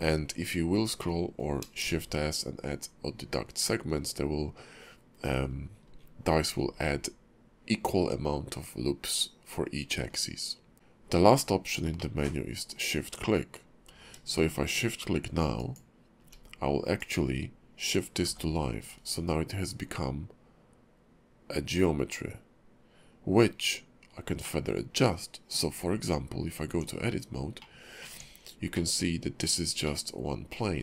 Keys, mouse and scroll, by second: 1.0 middle click, 10.7 q, 12.0 middle click, 17.0 click, 18.2 g, 24.0-24.4 scroll up 2, 24.4 middle click, 26.7 Tab, 27.6 middle click, 28.1 Tab, 28.7 middle click, 29.4 click, 29.8 middle click.